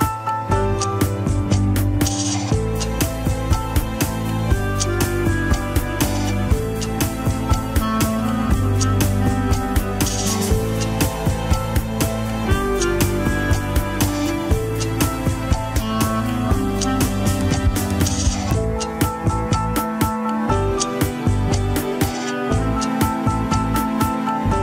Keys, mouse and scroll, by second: 0.0 click, 0.3 shift+middle click, 0.5 Tab, 1.0 click, 1.2 l, 2.5 Tab, 2.6 click, 2.7 KP_1, 3.1 shift+middle click, 3.3 scroll up 2, 3.5 Tab, 3.7 alt+z, 4.0 click, 4.9 click, 6.3 x, 10.7 click, 13.1 scroll down 3, 13.3 KP_7, 13.5 scroll up 3, 13.8 shift+middle click, 14.3 s, 17.9 click, 18.5 scroll up 2, 18.8 alt+z, 19.1 click, 19.6 alt+z, 19.9 click, 21.1 click, 21.8 click, 22.7 a, 22.9 KP_1, 23.9 e.